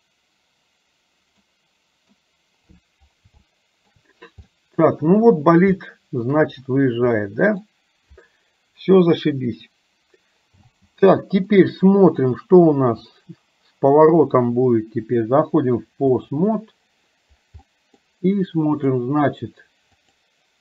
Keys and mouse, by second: 1.5 middle click, 3.5 shift+middle click, 4.6 middle click, 5.8 shift+middle click, 7.2 middle click, 10.7 space, 11.5 middle click, 15.1-16.5 drag, 17.7 middle click, 18.8 click, 20.1 click.